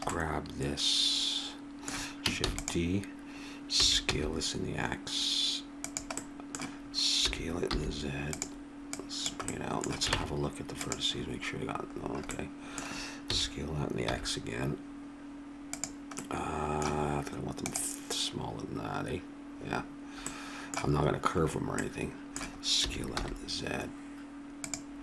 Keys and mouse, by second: 0.3 click, 2.4 shift+d, 3.8 s, 7.3 s, 9.5 click, 10.1 ctrl+Tab, 13.3 s, 20.2-23.7 middle drag, 22.8 s.